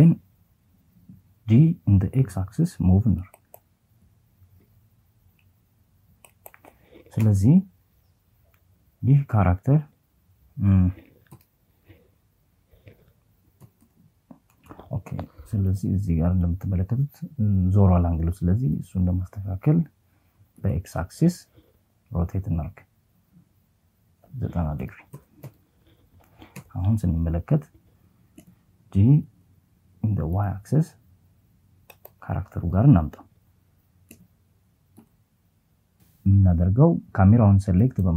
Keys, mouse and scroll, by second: 0.3 x, 1.3 click, 2.0 g, 2.7 z, 4.3 click, 5.3 KP_0, 9.3 KP_1, 11.6 KP_4, 11.9 KP_4, 16.7 r, 18.6 x, 22.8 KP_9, 23.3 KP_0, 23.6 KP_Enter, 24.6 KP_0, 26.4 g, 27.3 x, 28.3 y, 29.9 click, 32.1 g, 33.0 x, 34.8 click, 36.1 right click.